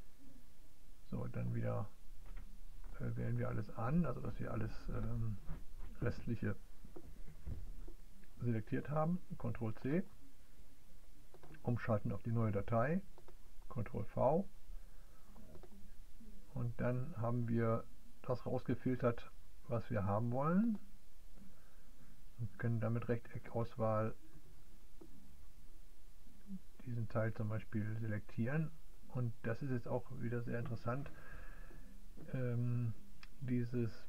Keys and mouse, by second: 0.6 click, 2.0-4.0 drag, 11.1-14.3 drag, 15.1-22.1 drag, 22.2-24.4 drag.